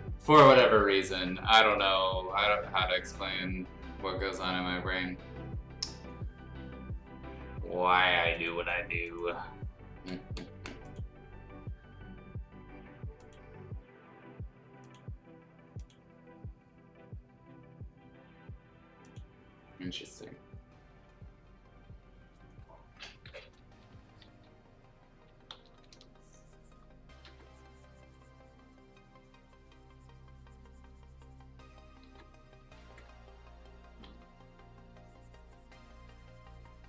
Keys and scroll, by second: 23.8 b, 24.4 [, 25.5 ], 27.2 x, 32.0 ctrl+z, 32.8 ctrl+z, 34.0 x.